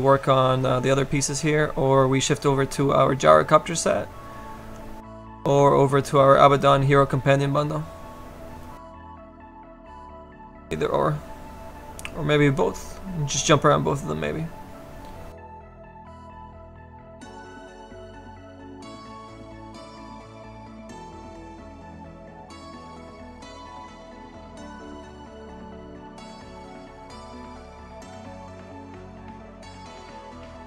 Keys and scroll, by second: 2.2 s, 4.6 s, 5.1 s, 16.1 s, 16.6 s.